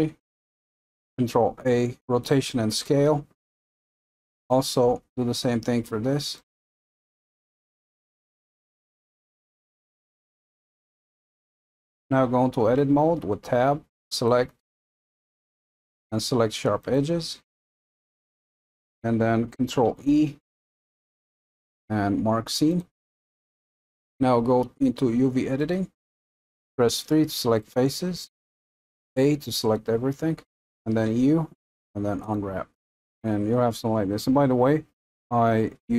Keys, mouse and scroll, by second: 4.4 click, 8.9-11.2 drag, 12.8 Tab, 16.9 click, 20.1 ctrl+e, 25.7 click, 29.1 a, 32.3 u.